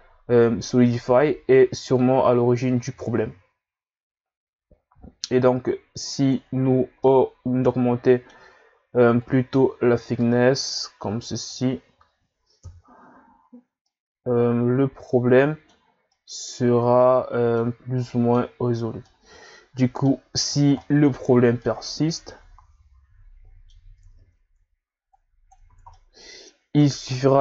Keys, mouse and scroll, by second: 0.5-2.0 scroll up 1, 2.0 click, 7.0-9.2 middle drag, 9.2 click, 12.6 KP_1, 13.8-18.6 middle drag, 18.6-19.0 scroll up 3, 19.0-24.7 middle drag, 25.1 click, 25.7 ctrl+z, 26.0-27.4 middle drag.